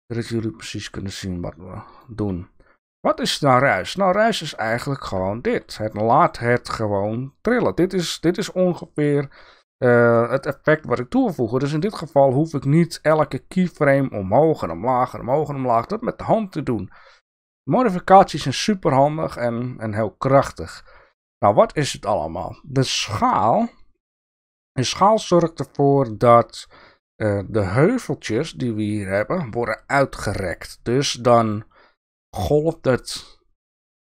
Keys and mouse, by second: 1.1-2.5 drag.